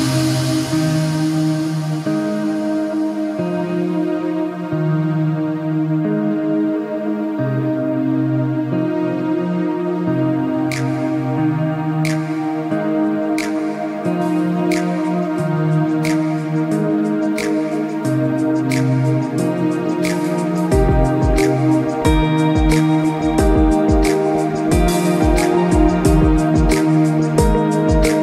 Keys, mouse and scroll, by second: 0.7 space, 1.7 Escape, 1.8 click, 2.1 space, 2.8 scroll up 1, 2.9 space, 3.1 click, 4.3 space, 4.5 click, 4.9 scroll down 1, 5.0 scroll up 1, 5.8 click, 7.4 Escape, 7.7 click, 8.0 alt+scroll up 2, 8.3 click, 8.8 z, 8.9 click, 9.9 alt+scroll down 1, 10.2 click, 10.6 space, 10.8 click, 11.5 click, 11.8 click, 13.4 click, 13.6 Escape, 13.7 alt+scroll up 2, 13.9 click, 14.3 click, 14.7 z, 14.9 click, 16.0 ctrl+click, 16.4 click, 16.8 space, 16.9 click, 17.3 scroll down 1, 17.4 scroll up 1, 17.7 click, 19.8 Escape, 19.9 scroll down 1, 20.1 click, 20.7 click, 22.3 click, 24.4 alt+scroll down 1, 24.5 alt+scroll up 1, 24.7 alt+scroll down 1, 25.0 scroll up 1, 25.3 click, 25.8 click, 26.1 Escape, 26.3 scroll down 1, 26.4 space, 26.6-27.1 alt+scroll up 2, 27.1 click, 27.6 Escape, 27.8 click.